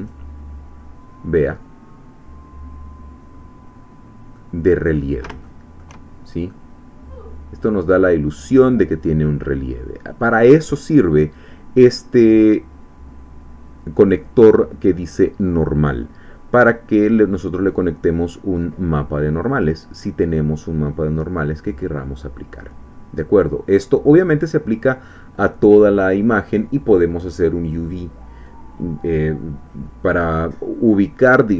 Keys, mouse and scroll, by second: 1.5-4.7 middle drag, 4.7-5.2 scroll up 2, 5.4 shift+middle click, 6.1 shift+scroll down 2, 6.5-8.9 middle drag, 9.1 scroll down 2, 20.9-21.3 scroll down 1, 21.4-27.2 middle drag, 27.8 click.